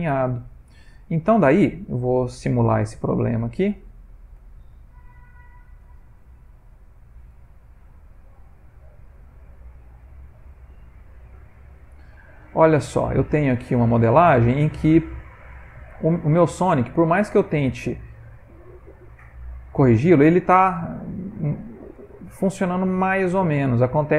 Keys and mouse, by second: 0.2 ctrl+middle click, 1.9 Tab, 2.8 click, 5.1 shift+s, 6.1 shift+s, 7.7 Tab, 8.7 click, 12.1 ctrl+middle click, 12.5 ctrl+middle click, 12.7 middle click, 13.5 ctrl+middle click, 14.4 middle click, 14.5 middle click, 14.8 middle click, 14.8 ctrl+middle click, 15.3 g, 17.0 Tab, 17.5 ctrl+middle click, 17.6 ctrl+middle click, 19.2 click, 19.4 g, 21.8 middle click, 23.3 ctrl+middle click.